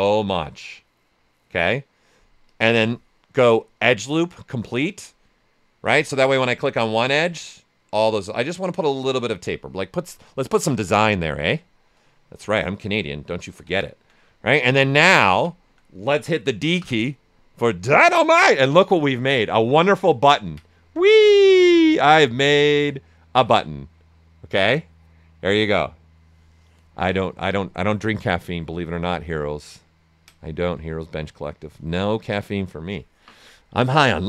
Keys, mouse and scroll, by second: 6.9-9.9 drag, 9.9-12.9 right drag, 12.9 ctrl+right click, 16.7 d, 17.5 shift+f, 19.0 right click, 20.3 ctrl+right click, 28.4 ctrl+alt+right click, 29.3 ctrl+right click, 31.6-34.2 ctrl+right drag.